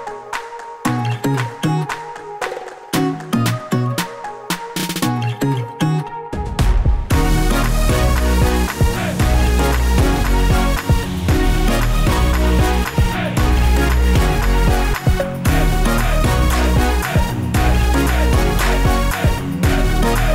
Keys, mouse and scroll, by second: 0.8 middle click, 2.7 click, 3.5 click, 4.3 middle click, 5.1 click, 6.9-7.9 scroll up 3, 7.2 middle click, 7.9 s, 8.4-8.9 scroll down 1, 8.9 click, 8.9-9.5 scroll down 3, 9.9-10.5 scroll up 3, 10.6-11.1 scroll down 3, 11.1 click, 12.0 shift+a, 17.7-20.3 click.